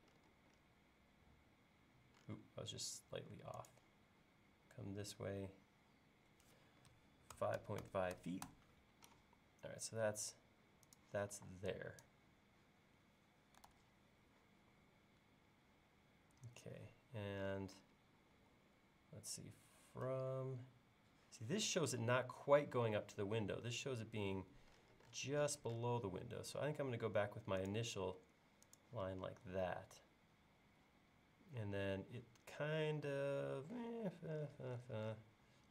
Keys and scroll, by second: 7.2-9.7 typing, 11.4 e, 13.7 super+z, 18.4 l, 29.5 l.